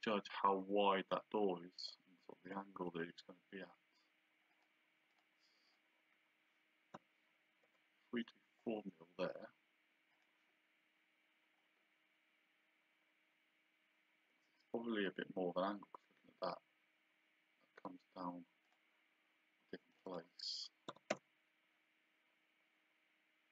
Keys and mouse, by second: 2.5 click, 4.5 click, 7.0 KP_4, 7.7 Return, 10.1 click, 18.7 click, 19.9 click, 20.9 KP_3.